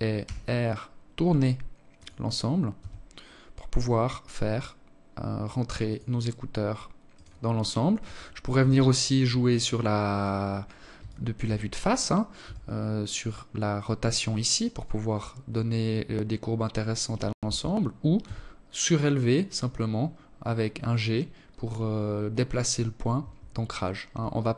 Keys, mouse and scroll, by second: 1.4 g, 5.7 right click, 7.2 KP_1, 8.7 right click, 9.7 alt+shift+click, 11.0 r, 16.7 g, 22.9 alt+click.